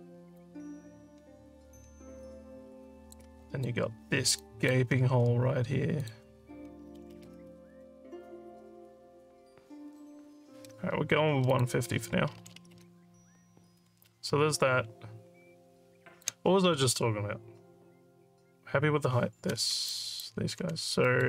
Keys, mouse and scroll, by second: 0.3-3.1 alt+drag, 3.4 alt+click, 4.4 alt+click, 6.0 click, 11.5 click, 14.1-16.2 alt+drag, 19.9 alt+click, 21.1 alt+middle click.